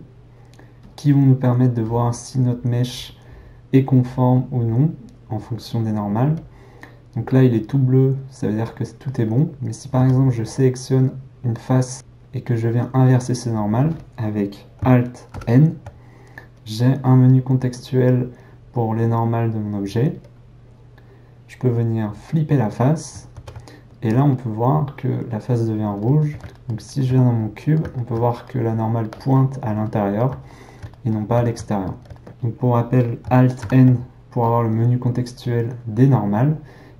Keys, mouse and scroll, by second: 7.5-10.5 middle drag, 10.5 click, 23.3 alt+a, 24.3-36.9 middle drag.